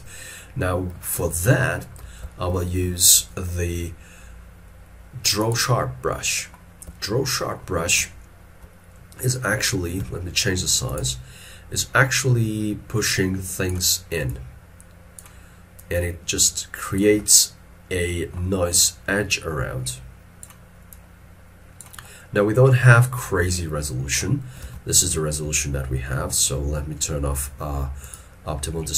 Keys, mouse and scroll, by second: 0.2 scroll down 1, 1.3 middle click, 2.4 shift+middle click, 6.3 middle click, 7.0 ctrl+middle click, 8.2 ctrl+middle click, 17.4 middle click, 24.6 middle click, 24.7 alt+e, 25.1-25.6 scroll up 1.